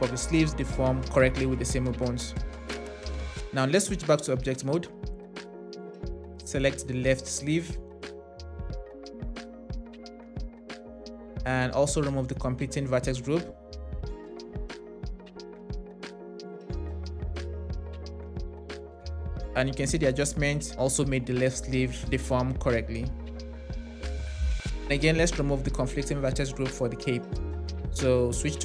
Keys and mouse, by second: 4.2 Tab, 5.3 drag, 6.5 click, 8.8-9.3 Right, 14.7 click, 15.8 click, 18.7 space, 25.9 space, 26.8 click, 28.1 Tab.